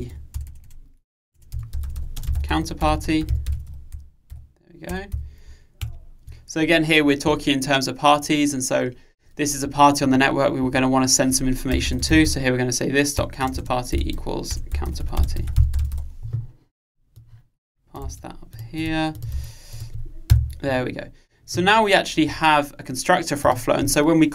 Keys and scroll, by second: 6.0 alt+Return, 13.2 Return, 18.2 super+c, 19.4 super+v.